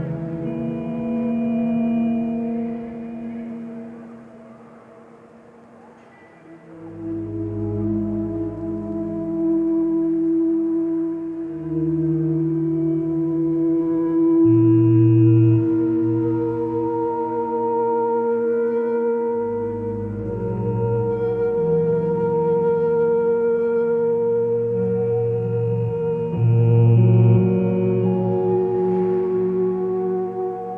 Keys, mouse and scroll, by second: 4.9 ctrl+t, 17.5 ctrl+space, 24.5 x, 26.1 ctrl+z, 27.1 x, 29.2 x.